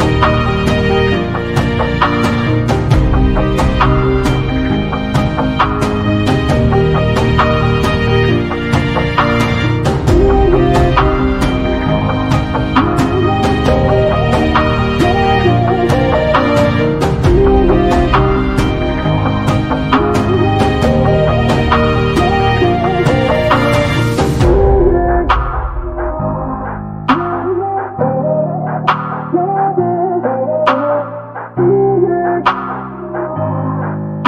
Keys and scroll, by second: 32.0 1, 33.9 2.